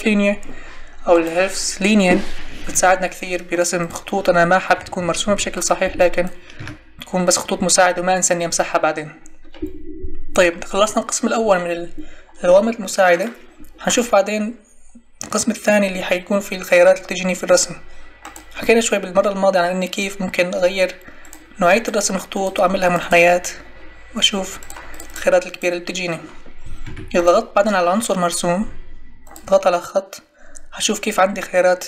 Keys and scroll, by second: 4.8 Escape, 6.5 Delete, 26.8 Escape.